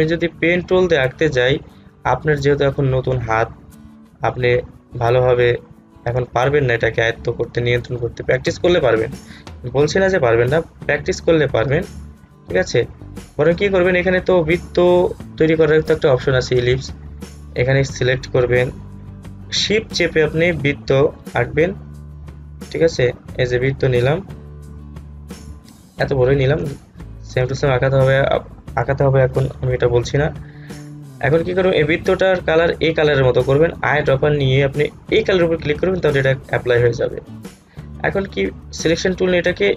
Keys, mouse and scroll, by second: 0.6 click, 3.9-11.7 drag, 11.8 click, 14.5-19.7 drag, 20.2-29.7 shift+drag, 34.3 shift+click, 37.7 shift+click.